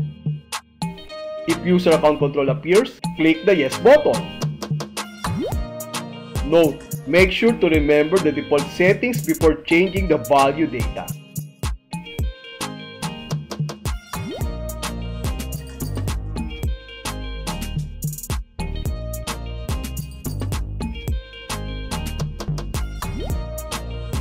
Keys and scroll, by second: 0.4 Return, 3.8 Left, 4.8 space, 11.2 h, 13.0 h, 15.0 Right, 17.0 s, 19.0 Right, 20.9 p, 22.9 Right.